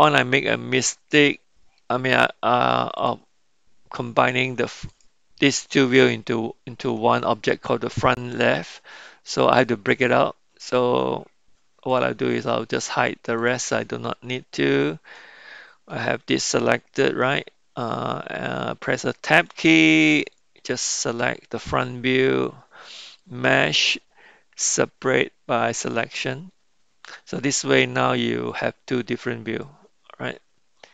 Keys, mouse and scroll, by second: 3.0 click, 4.9 click, 11.9 click, 12.3 click, 13.4 click, 15.1-15.9 middle drag, 19.4 Tab, 20.3 click, 23.0-26.1 drag, 27.7 Tab, 28.1 drag, 28.5 click, 29.5 click.